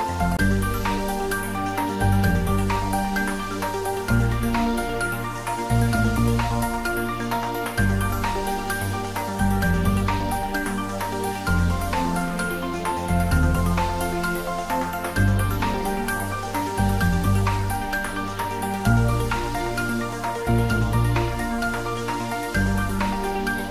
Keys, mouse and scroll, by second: 0.0 ctrl+z, 0.7 shift+click, 1.9-2.4 scroll down 1, 3.8 g, 10.7 g, 10.8 click, 11.6-12.3 scroll down 1, 18.1 click, 19.8 shift+click, 22.0 shift+d.